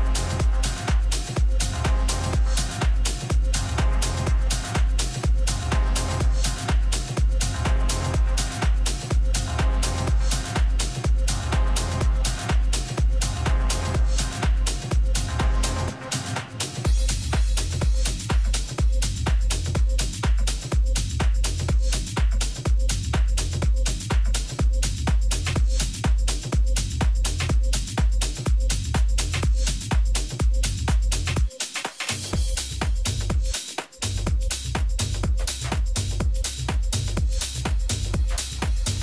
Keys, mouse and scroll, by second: 2.8-4.7 middle drag, 5.2-7.1 drag, 6.3-8.2 middle drag, 8.3-11.4 middle drag, 12.8-15.1 middle drag, 17.1-19.2 middle drag, 17.9 a, 19.3 alt+h, 21.0 a, 21.6-23.7 middle drag, 23.7-25.6 right drag, 24.2-26.9 middle drag, 27.1-29.1 right drag, 27.8 click, 27.8-29.5 middle drag, 29.7 right click, 30.2-31.6 drag, 30.2 middle click, 35.4 Tab, 36.1 a, 36.8 a, 37.2 Tab.